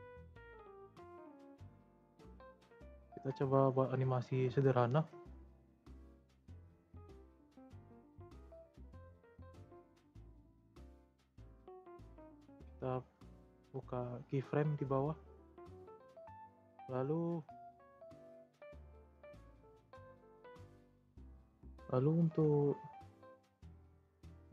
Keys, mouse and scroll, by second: 0.4 click, 0.8-4.2 middle drag, 4.2 Tab, 5.3 Tab, 5.7-8.7 drag, 8.7 click, 9.4-10.6 drag, 10.6-11.0 scroll down 3, 11.0-11.6 middle drag, 11.6-12.4 scroll up 1, 12.6-18.2 scroll up 1.